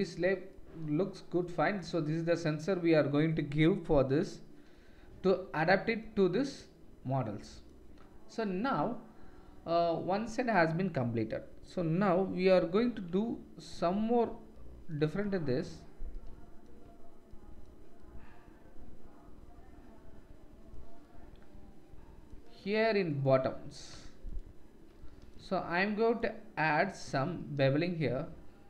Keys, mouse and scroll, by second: 0.5-12.9 middle drag, 13.8 Tab.